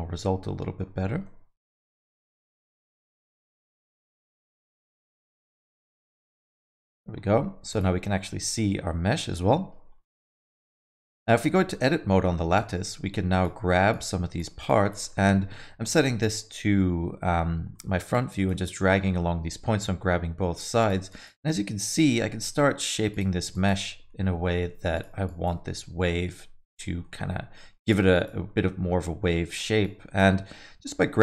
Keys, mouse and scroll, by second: 1.2 KP_6, 2.3 scroll up 3, 2.6 middle click, 3.0 scroll up 2, 3.2 alt+middle click, 3.6 middle click, 4.7 shift+z, 4.9 middle click, 6.3 KP_1, 7.7 click, 8.2 middle click, 9.5 middle click, 9.9 middle click, 10.5 scroll up 2, 10.7 middle click, 11.5 Tab, 11.7 middle click, 12.5 click, 13.9 click, 14.7 click, 15.1 middle click, 15.8 middle click, 17.7 middle click, 18.1 click, 18.6 middle click, 19.4 g, 21.1 click, 22.1 g, 23.5 click, 24.3 g, 25.2 click, 26.0 g, 27.0 middle click, 27.5 middle click, 28.1 click, 28.9 g, 29.8 click, 30.8 g.